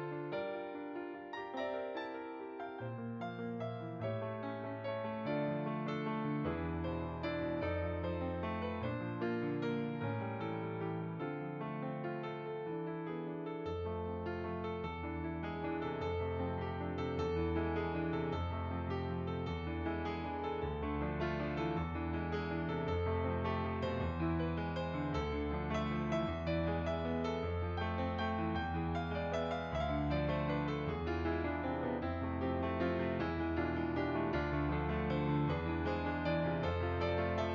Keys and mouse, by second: 1.5 click, 1.6 ctrl+i, 8.3 right click, 9.5 right click, 9.8 right click, 10.3 click, 12.6 right click, 13.9 right click, 15.4 click, 17.2 middle click, 18.7 click, 19.4 middle click, 20.6 middle click, 21.0 click, 22.3 middle click, 24.5 click, 24.8-26.5 typing, 25.5 click, 26.0 click, 30.2 click, 32.3 click, 32.9 click, 35.0 middle click, 36.1 click, 37.2 middle click.